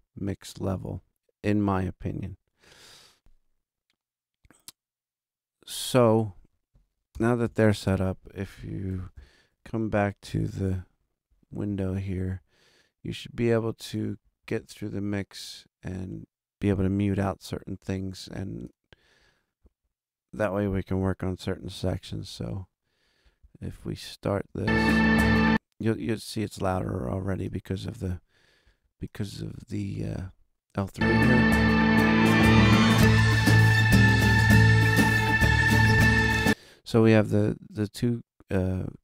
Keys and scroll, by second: 7.4 super+=, 9.1 ctrl+alt+super+Up, 10.2 ctrl+alt+super+a, 22.1 super+=, 30.7 space.